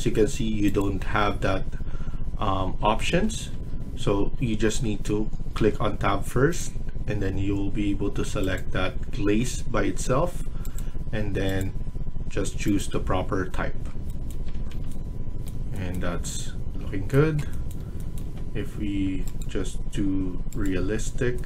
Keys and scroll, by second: 2.7 Escape, 3.0 Escape, 3.5 Escape, 5.5 Tab, 9.5 Tab, 14.2 Escape, 14.5 Escape.